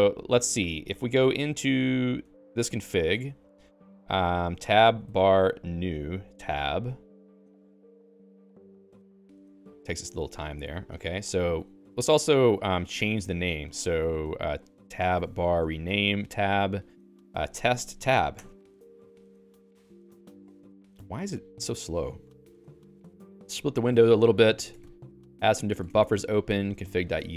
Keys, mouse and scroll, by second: 0.8 click, 3.1 Escape, 3.5 alt+x, 4.2-6.7 typing, 9.1 Return, 13.2 alt+x, 15.1-18.5 typing, 21.2 Return, 24.6 ctrl+click.